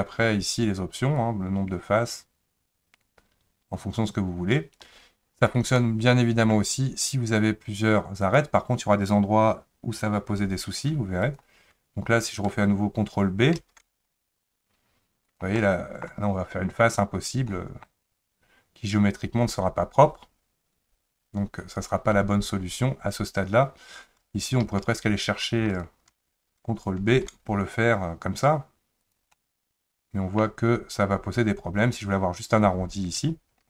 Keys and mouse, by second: 1.2-4.8 drag, 5.8 middle click, 8.2 click, 11.3 ctrl+click, 13.6 ctrl+b, 15.6 middle click, 17.5 middle click, 24.7 ctrl+z, 25.7 shift+click, 27.1 ctrl+b, 29.3-30.4 middle drag.